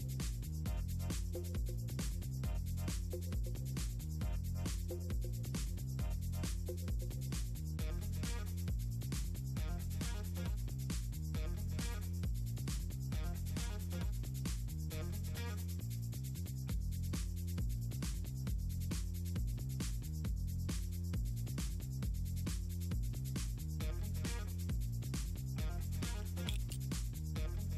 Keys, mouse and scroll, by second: 0.6 click, 1.4 click, 2.1 click, 2.3 click, 2.6 click, 3.8 scroll up 2, 4.0 scroll down 2, 4.4 click, 5.7 click, 6.2 click, 8.5 click, 9.2 click, 9.9 click, 10.1 click, 11.2 click, 12.2 click, 12.7 click, 13.1 click, 13.3 click, 13.8 scroll up 2, 15.2 click, 17.5 click, 19.9-20.7 drag, 23.8 click, 25.3 click, 27.2 click.